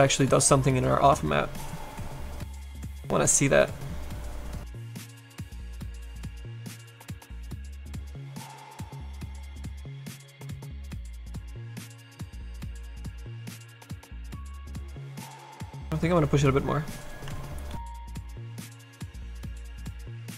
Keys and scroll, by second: 17.2 s, 17.8 s.